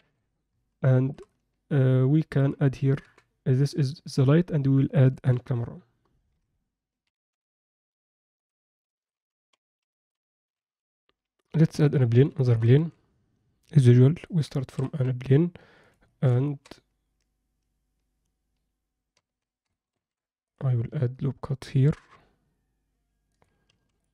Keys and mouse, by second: 0.0 KP_7, 1.0 alt+shift+middle click, 1.3-2.4 alt+middle drag, 4.9 ctrl+alt+middle click, 8.9 alt+shift+middle click, 9.9 shift+middle click, 10.3 shift+right click, 10.7 shift+a, 12.4 alt+shift+middle drag, 12.7 s, 14.7 s, 16.1 shift+middle drag, 16.5 ctrl+alt+middle click, 19.1 Tab, 19.9 ctrl+r, 23.7 ctrl+r.